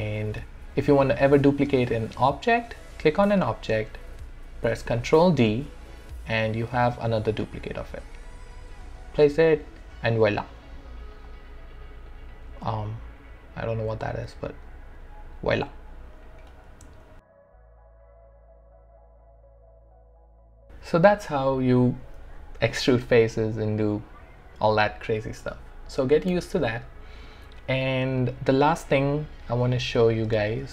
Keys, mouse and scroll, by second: 0.1 alt+middle click, 0.9 click, 4.7 ctrl+d, 6.4-9.1 drag, 9.4-17.0 alt+drag, 20.7-23.3 alt+right drag.